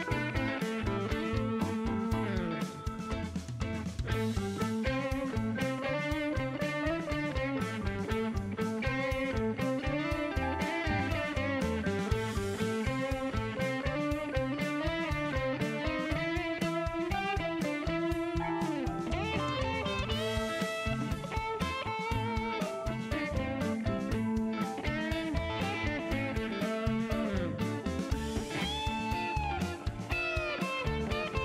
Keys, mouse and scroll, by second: 1.0 click, 2.6 click, 3.0 Delete, 4.2 click, 5.0 click, 6.7 click, 8.1-9.4 drag, 10.0 click, 10.2 Delete, 10.7 click, 12.1 click, 13.5 click, 14.9 click, 16.6 click, 18.2 5, 18.3 Return, 21.0 click, 23.3 middle click, 26.1 click, 27.4 click, 29.0 click.